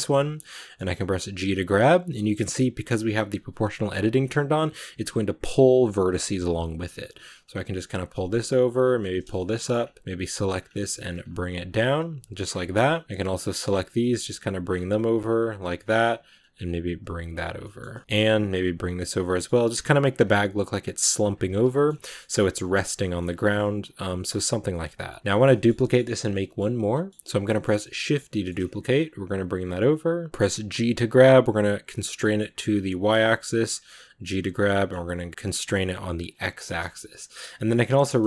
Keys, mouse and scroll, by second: 0.8 g, 5.7 right click, 6.0 middle click, 6.2 g, 8.6 right click, 8.7 g, 9.2 shift+middle click, 9.6 scroll up 2, 10.0 right click, 10.1 g, 11.8 right click, 11.9 g, 12.3 scroll down 1, 12.4 shift+middle click, 13.2 right click, 13.3 scroll up 1, 13.5-13.8 scroll down 1, 13.8 g, 15.6 middle click, 16.2 right click, 16.3 g, 17.4 scroll down 1, 17.5 middle click, 18.1 right click, 18.1 scroll up 1, 18.4 g, 19.0 scroll down 2, 19.1 middle click, 19.4 g, 19.9 right click, 20.0 g, 20.7 right click, 21.0 g, 21.4 Tab, 21.5-23.2 middle drag, 23.2 Tab, 23.2-23.5 scroll up 2, 23.7 right click, 23.9 g, 24.3 Tab, 24.4 scroll down 1, 24.6-27.7 middle drag, 27.7 shift+d, 30.3 g, 33.3 middle click, 34.2 g, 36.5-37.9 shift+middle drag, 37.9 r.